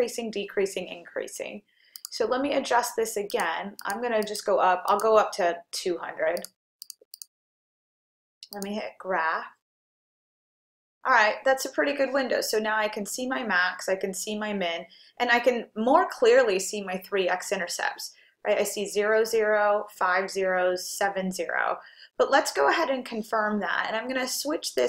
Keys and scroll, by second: 2.0 F2, 3.3 Down, 3.9 Down, 4.9 Down, 6.5 2, 7.0 0, 7.6 0.